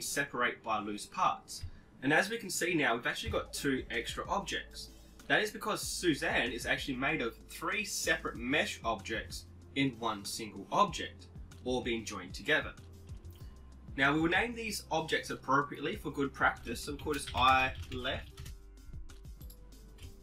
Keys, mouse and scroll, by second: 3.3 Tab, 4.7-6.4 drag, 16.6 click, 17.7 click, 19.4-20.2 right drag.